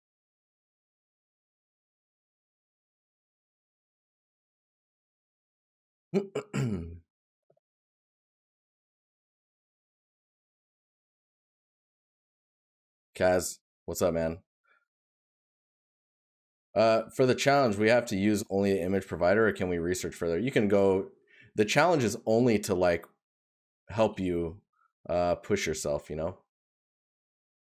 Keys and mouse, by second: 2.2 right click, 13.7 right click.